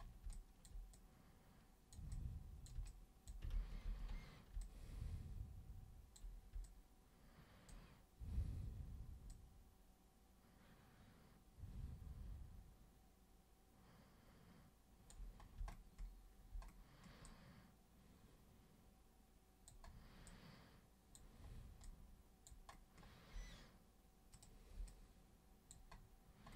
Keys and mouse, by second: 0.3 alt+super+click, 0.9-1.9 super+drag, 2.1 super+click, 2.8 alt+super+click, 3.5 ctrl+super+z, 3.8 ctrl+super+z, 4.6-6.2 alt+super+drag, 6.6-7.7 alt+super+drag, 9.3-15.0 alt+super+drag, 17.2-19.7 alt+super+drag, 20.3 alt+super+click, 21.8 alt+super+click, 24.3 super+click, 24.8 alt+super+click.